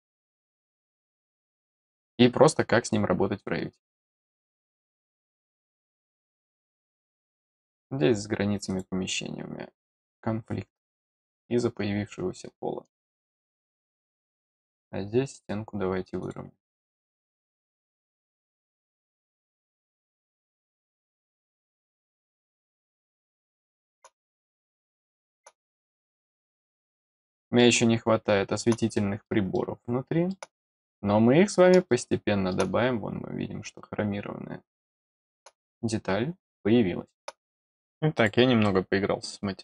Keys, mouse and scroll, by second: 7.5 click, 8.6 click, 10.9 click, 12.4 scroll up 1, 13.5 middle click, 16.2 click, 18.2 click, 20.4 click, 22.4 middle click, 22.9-23.9 middle drag, 24.2 middle click, 24.8 middle click, 26.6 middle click, 27.5-28.5 middle drag, 28.9 middle click, 29.5 middle click, 31.8 middle click, 32.7-33.2 scroll up 3, 33.6-35.3 middle drag, 35.4-35.9 scroll down 2, 36.5 middle click, 37.5 click, 38.1 click, 38.6-39.6 middle drag.